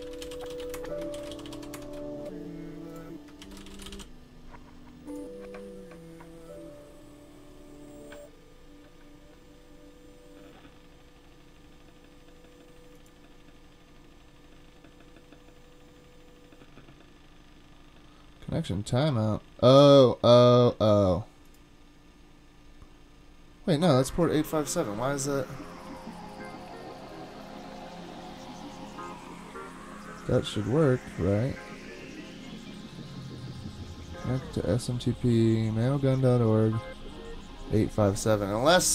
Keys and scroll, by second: 0.0-2.1 typing, 3.4-4.4 typing.